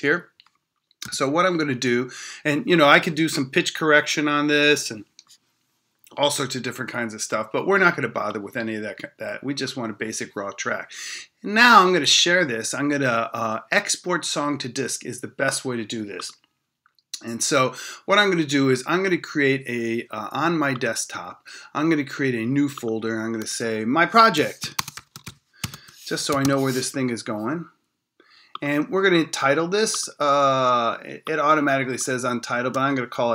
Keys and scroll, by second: 1.0 e.